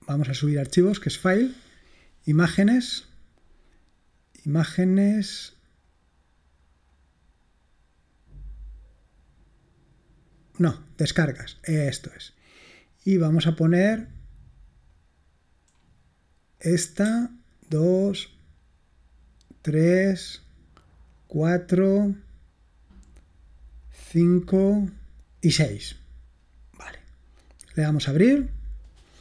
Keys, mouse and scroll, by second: 2.5 click, 6.9 click, 14.9 click, 16.6 click, 17.6 ctrl+click, 19.6 ctrl+click, 21.1 ctrl+click, 23.9 ctrl+click, 25.5 ctrl+click, 27.8 click.